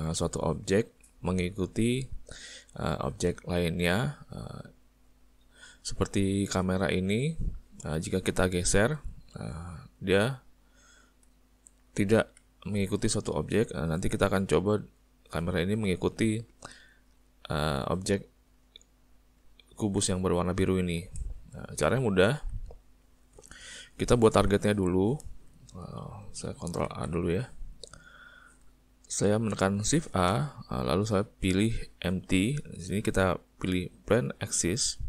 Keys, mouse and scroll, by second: 5.2 middle click, 6.2 ctrl+middle click, 7.8 click, 9.0 g, 11.6 middle click, 12.5 ctrl+middle click, 13.1 middle click, 14.0 g, 18.9 middle click, 19.6 ctrl+middle click, 20.6 middle click, 21.3 shift+middle click, 21.8 middle click, 22.2 ctrl+middle click, 22.5 middle click, 23.7 ctrl+middle click, 26.9 alt+a, 30.0 shift+a.